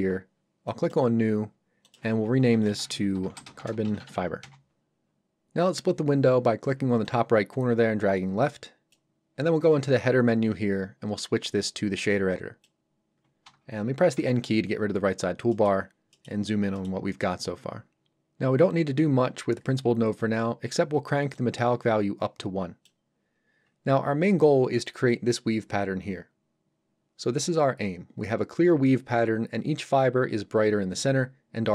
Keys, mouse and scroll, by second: 2.5-4.4 typing, 7.1 click, 12.3 click, 14.2 n, 14.8 scroll up 1, 15.5 middle click, 15.9 scroll up 1, 16.1 middle click, 16.4 scroll down 1, 16.8 middle click, 21.4 click.